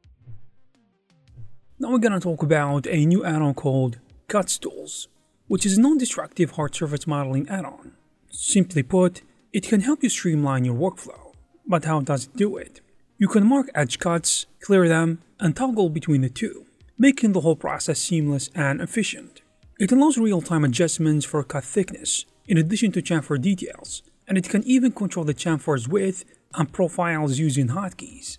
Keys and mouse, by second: 0.0 alt+shift+z, 0.3 alt+shift+q, 0.4 alt+shift+z, 0.6 middle click, 0.7 alt+shift+z, 0.9 middle click, 1.3 shift+q, 1.4 middle click, 1.9 middle click, 2.1 1, 2.3 k, 4.1-6.1 typing, 4.7 middle click, 4.9 alt+shift+z, 5.0 middle click, 5.3 alt+shift+z, 7.3 middle click, 7.7 alt+shift+z, 7.7 alt+middle click, 8.0 alt+shift+z, 8.1 2, 8.2 3, 8.4 shift+q, 8.6 shift+q, 10.4 middle click, 10.6 alt+shift+z, 10.8 middle click, 11.0 alt+shift+z, 11.0 middle click, 11.6 middle click, 11.9 middle click, 12.2 3, 12.6 alt+2, 13.2 shift+q, 13.9 p, 14.5 middle click, 14.9 ctrl+shift+q, 15.4 ctrl+click, 15.6 ctrl+z, 16.0 ctrl+click, 16.2 shift+q, 16.9 shift+q, 17.3 alt+shift+z, 17.5 middle click, 17.7 click, 18.0 shift+q, 18.6 shift+q, 18.8 alt+shift+z, 18.8 middle click, 19.0 alt+shift+z, 19.3 middle click, 20.8-24.5 typing, 21.0 click, 21.2 middle click, 21.3 alt+z, 21.5 shift+click, 21.9 middle click, 22.3 middle click, 22.3 alt+z, 22.8 middle click, 23.2 alt+shift+z, 23.4 middle click, 23.6 alt+shift+z, 23.8 ctrl+x, 23.9 alt+shift+z, 24.0 alt+shift+z, 24.3 shift+click, 24.5 middle click, 24.6 alt+shift+z, 24.7 middle click, 25.1 middle click, 25.6 ctrl+shift+click, 25.9 alt+2, 26.3 shift+q, 26.9 click, 27.4 shift+q.